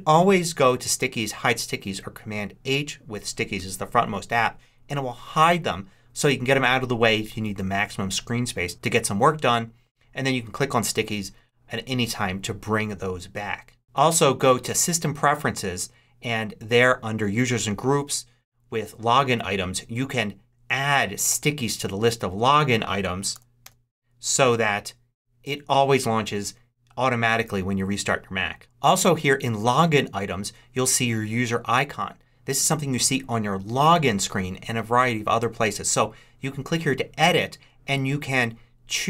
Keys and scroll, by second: 23.2 s, 23.5 t.